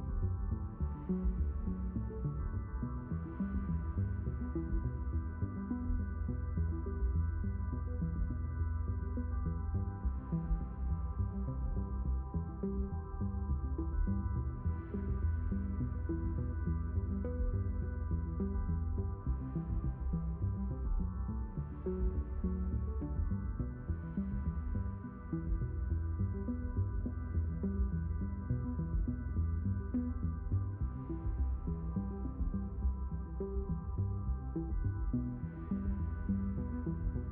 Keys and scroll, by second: 11.0 y, 23.9 y.